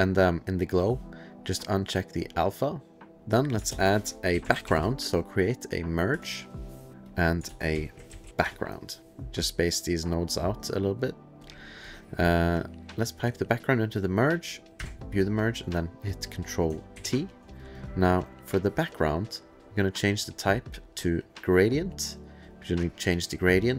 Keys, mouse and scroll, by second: 0.0 click, 2.2 click, 3.2 ctrl+click, 3.2 click, 3.7 ctrl+shift+space, 4.1-5.1 typing, 6.1 Return, 6.9 click, 7.0 click, 7.3 click, 7.4-8.8 typing, 9.2 click, 10.2 click, 10.7 middle click, 11.0 click, 11.4 click, 11.6 click, 11.8 click, 12.7 click, 14.0 click, 14.8 2, 16.9 ctrl+t, 17.6 click, 17.7 click, 17.8 click, 19.4 click, 19.9 click, 21.5 click, 22.4 click.